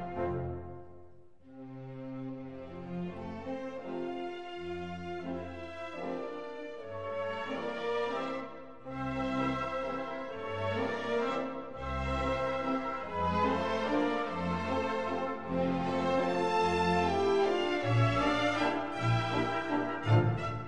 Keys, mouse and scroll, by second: 3.0-4.8 drag, 5.6-7.6 middle drag, 7.9-9.8 drag, 10.5-12.4 middle drag, 14.4 Tab, 18.5-20.1 drag, 20.4-20.6 middle drag.